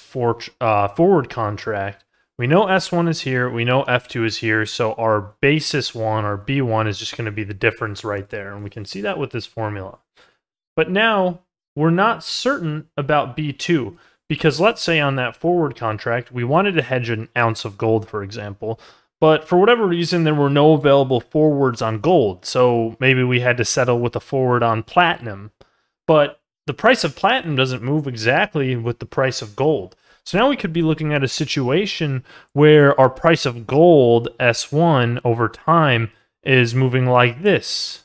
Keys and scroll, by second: 9.2 ctrl+z.